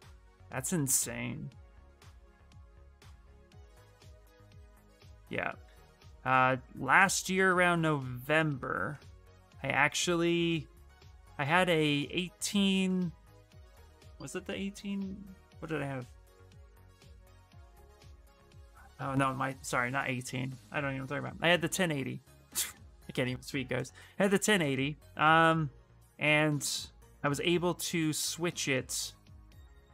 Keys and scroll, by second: 0.0 s, 0.6 space, 2.5 ctrl+z.